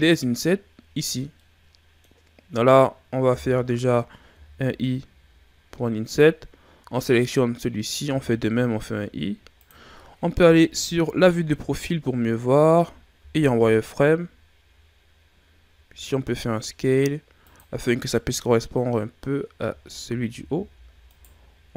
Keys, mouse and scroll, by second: 1.4-4.3 middle drag, 4.3 i, 7.1 right click, 8.1 i, 10.4 KP_3, 11.6-13.2 scroll up 5, 13.2 z, 15.7 s, 20.0 shift+scroll up 2, 20.4 z, 21.1 right click.